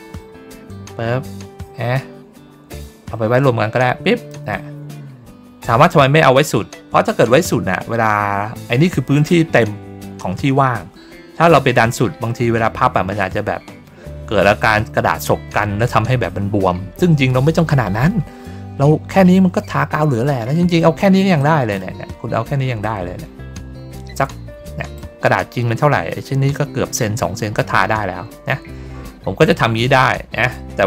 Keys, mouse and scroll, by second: 0.6-4.2 drag, 21.3 click, 22.7-24.8 drag, 25.1 ctrl+middle click, 25.9 ctrl+middle click, 27.0 ctrl+middle click, 28.4 ctrl+middle click, 29.2 ctrl+middle click.